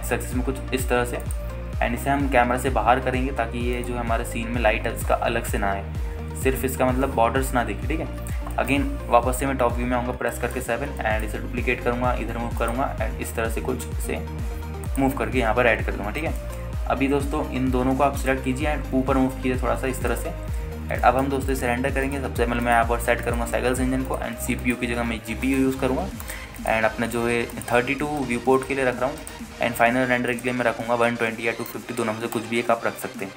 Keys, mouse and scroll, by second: 0.0 r, 0.3 x, 2.4-2.8 ctrl+drag, 2.8 scroll down 1, 3.5 r, 3.7 z, 5.0 click, 5.5-6.4 scroll up 2, 9.3 scroll down 1, 9.7 shift+middle drag, 10.3 KP_7, 10.7-11.2 scroll down 2, 11.0 scroll up 1, 11.5 shift+middle drag, 11.5-12.0 scroll up 2, 12.2 shift+middle drag, 12.7 shift+d, 13.8 click, 14.1 t, 14.9 r, 16.0 click, 16.3 KP_0, 17.6 ctrl+space, 18.6-19.1 scroll down 2, 19.4 shift+click, 20.1 g, 20.4 z, 21.3 click, 21.6-22.2 scroll up 2, 22.2 shift+middle drag, 23.2 click, 23.8-24.7 drag, 26.6-33.3 drag.